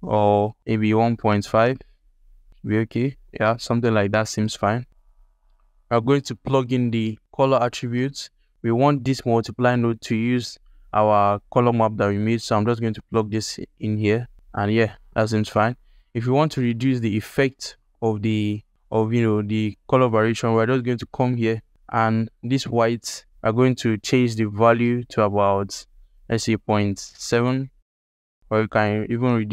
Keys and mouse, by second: 0.6-2.5 drag, 5.0 ctrl+alt+click, 5.4 alt+shift+click, 6.0 ctrl+alt+click, 6.5 alt+shift+click, 7.8 alt+shift+click, 9.5 click, 11.8-13.3 drag, 21.1 click.